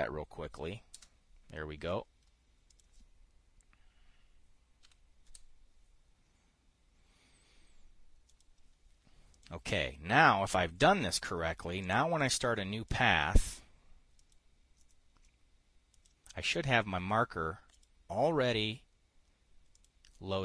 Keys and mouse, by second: 1.4 Return, 5.3 5, 5.8 Return, 8.8 click, 9.8 drag, 12.3 click, 12.8 click, 13.4 click, 13.9 click, 14.6 click, 15.3 click, 16.4 click, 18.2 click, 20.2 click.